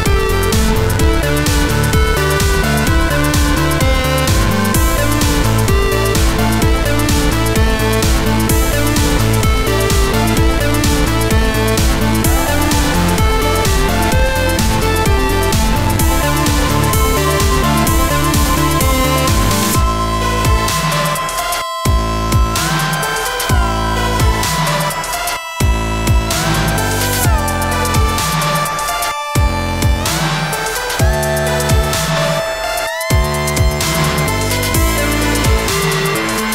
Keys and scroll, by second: 7.7 5, 9.7-10.4 typing, 12.7 3, 14.7-15.4 typing.